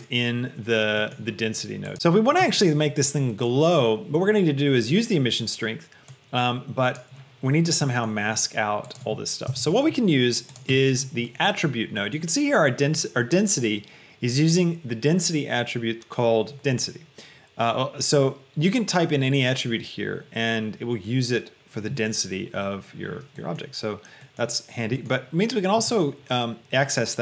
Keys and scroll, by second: 2.0 Return, 2.0 KP_1, 9.6 KP_0, 10.0 Return.